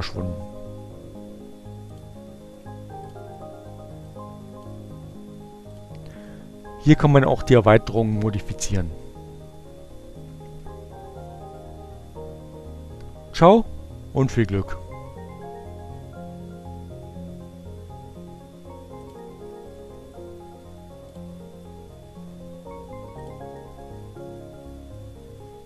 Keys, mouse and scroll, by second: 0.0 click, 0.9-1.9 drag, 3.1 click, 17.8 click, 20.7 click, 23.1 click.